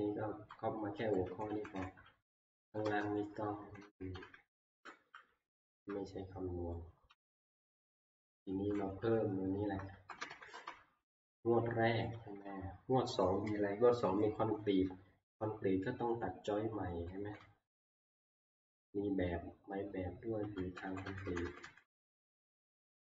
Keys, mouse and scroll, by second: 0.0 Down, 0.0-0.5 Up, 0.5 Down, 1.0 Down, 1.2 Down, 1.5 Down, 1.8 Down, 2.3 Up, 3.1 scroll, 5.8-7.2 typing, 8.3 Down, 8.5 Down, 8.5 Up, 8.8-9.8 Left, 9.9 Down, 10.2 Down, 10.3 Down, 16.9 Down, 17.1 Down, 17.4 Down, 17.7 Down, 17.9 Down, 18.2 Down, 20.8 Up, 20.9 Down, 21.1 Down, 21.2 Down, 21.4 Down, 21.6 Down, 21.8 Down, 22.1 Down, 22.3 Right, 22.6 Right, 22.8 Right.